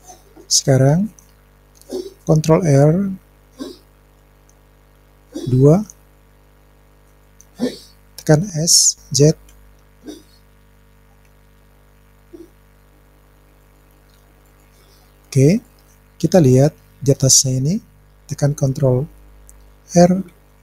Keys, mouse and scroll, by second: 4.6 ctrl+r, 8.8 s, 9.5 z, 13.6-14.6 drag, 15.7-17.3 middle drag, 17.4 scroll up 1, 20.3 ctrl+r.